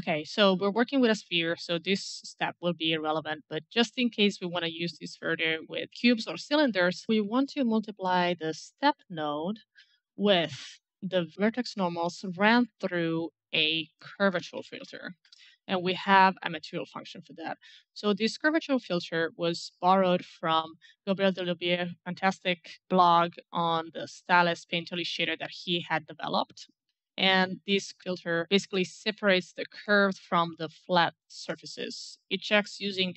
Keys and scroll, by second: 12.6-14.1 typing, 15.4 Return, 15.4 Caps_Lock.